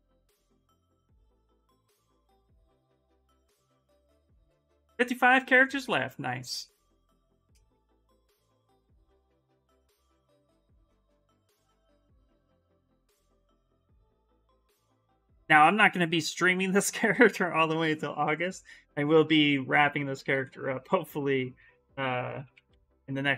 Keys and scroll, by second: 21.9-23.3 typing.